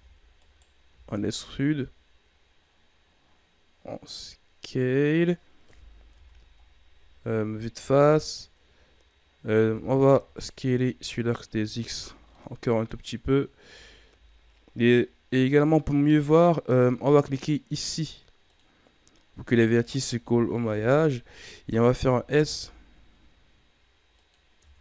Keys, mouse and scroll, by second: 0.8 s, 5.6 KP_1, 6.1 Tab, 6.5 scroll down 4, 7.0-7.5 ctrl+scroll up 5, 7.7 Tab, 9.6 s, 12.3-15.3 middle drag, 18.4 click, 19.7 alt+right click, 20.6 KP_1, 22.0 s, 24.5 Tab.